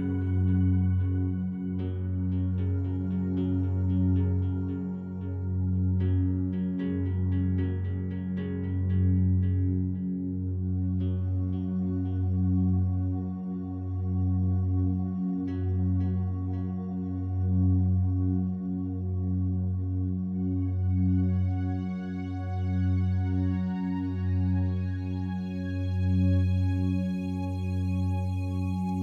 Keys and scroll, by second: 1.9 space, 8.2 space, 11.6 space, 23.4 ctrl+shift+i.